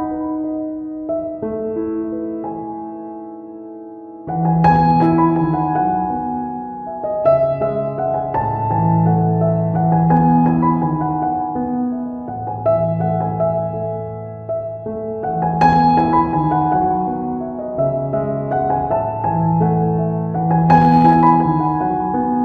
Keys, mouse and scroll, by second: 0.1 middle click, 0.8 ctrl+middle click, 1.4 right click, 1.7 ctrl+right click, 2.9 f, 4.4 right click, 4.7 click, 5.4 click, 7.9 click, 10.6 middle click, 12.3 ctrl+middle click, 13.1 shift+middle click, 14.6 middle click, 15.3 middle click, 17.1 middle click, 18.2 shift+middle click, 20.3 middle click, 20.4 shift+middle click, 21.8 middle click, 22.1 middle click.